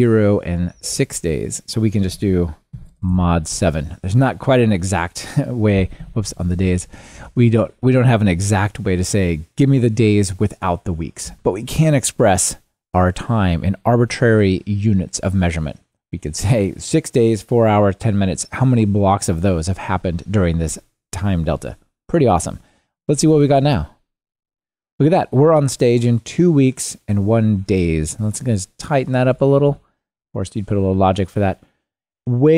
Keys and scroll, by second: 6.7 super+x, 7.1 super+v, 23.6 ctrl+r, 29.7 ctrl+r.